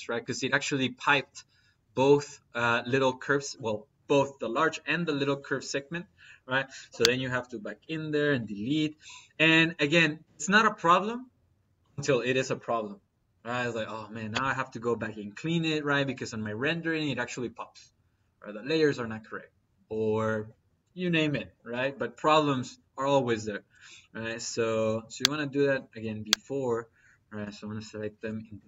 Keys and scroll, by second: 8.2 Delete, 27.2 Delete.